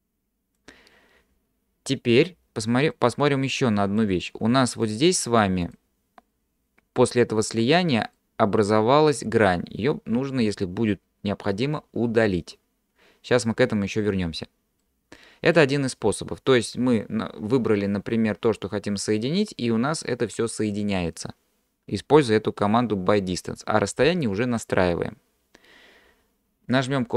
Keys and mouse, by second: 3.0-4.1 middle drag, 4.9 click, 8.2 middle click, 14.8 middle click.